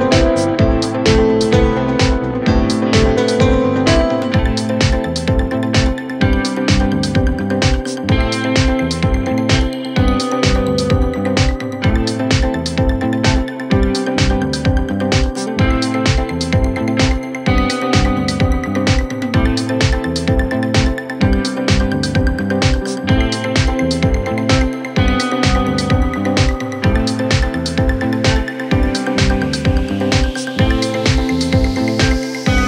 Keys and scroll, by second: 18.2 Right.